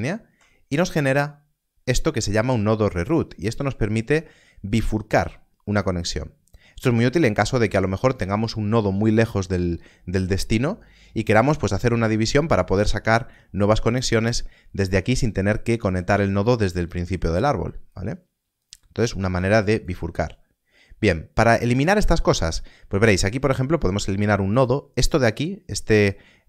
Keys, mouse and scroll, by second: 12.7 click, 17.9 click, 23.5 click.